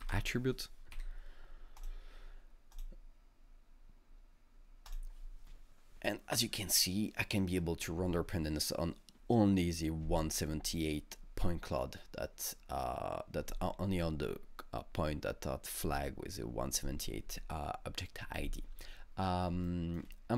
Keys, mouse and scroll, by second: 0.0 shift+i, 1.8 click, 2.7 click, 2.7 d, 4.9 click, 19.5 alt+Num_Lock, 19.7 alt+middle click, 19.7 click.